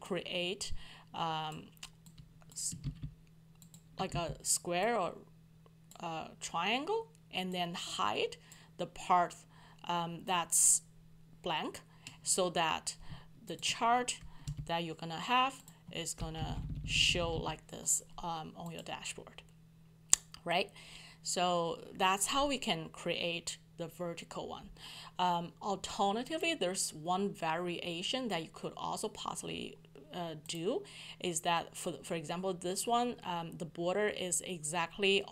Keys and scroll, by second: 2.8 ctrl+c, 4.1 ctrl+v, 14.4 shift+Delete.